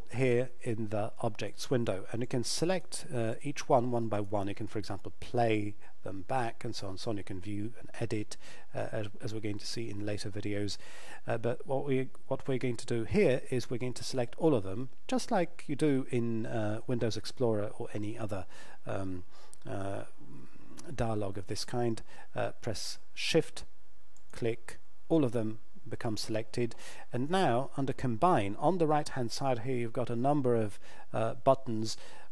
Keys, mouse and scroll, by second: 1.4 click, 23.2 shift+Num_Lock, 24.2 shift+click.